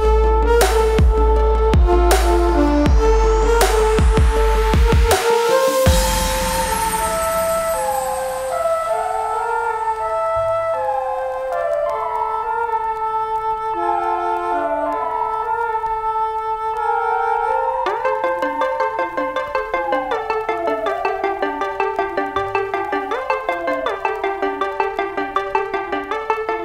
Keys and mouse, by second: 1.0-14.1 shift+drag, 1.2 typing, 13.0 typing, 14.1-16.1 shift+drag, 15.9-16.4 typing, 19.6 typing, 20.4 Down, 21.4 Down, 21.8 ctrl+t, 22.1 Down, 22.7 Down, 24.9 click.